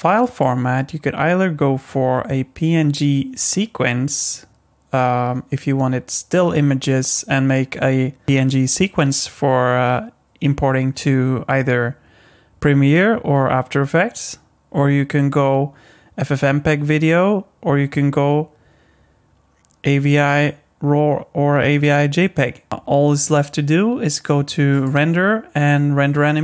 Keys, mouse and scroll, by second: 0.3 click, 22.7 click, 24.7 click.